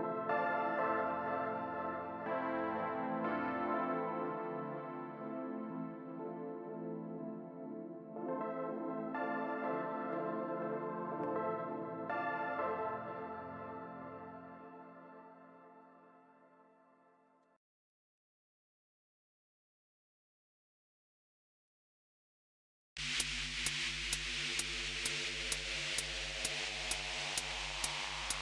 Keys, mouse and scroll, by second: 0.0-1.0 typing, 2.9-4.3 typing, 5.3 typing, 6.6 typing, 8.6-9.3 Left, 9.5 Left, 9.8 Return, 10.4 Up, 12.2-20.3 typing, 21.7 Return, 23.0-26.6 typing.